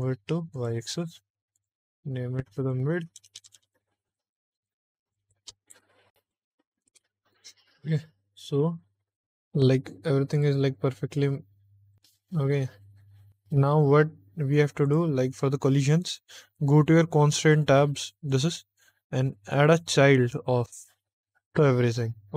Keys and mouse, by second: 0.0 y, 0.4 click, 1.4 click, 1.6-7.1 drag, 3.3 BackSpace, 3.6 BackSpace, 4.2 Left, 4.4 Left, 5.2 BackSpace, 5.6 BackSpace, 10.2 click, 11.8 click, 14.7 click, 18.1 click, 19.5-20.7 drag.